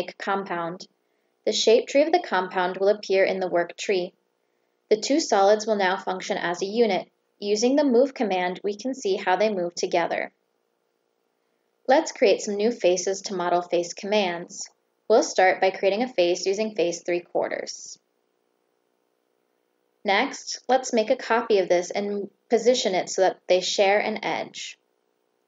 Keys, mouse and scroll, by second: 0.7 click, 1.7 click, 2.1 click, 2.4 click, 2.7 click, 3.0 click, 3.2 click, 3.4 click, 3.8 click, 4.7 Escape, 5.8 click, 6.3 click, 7.7 click, 8.7 click, 10.0 click, 13.9 click, 15.1 click, 16.8 click, 17.6 click, 18.6 click, 21.6 click, 23.1 click, 24.2 click.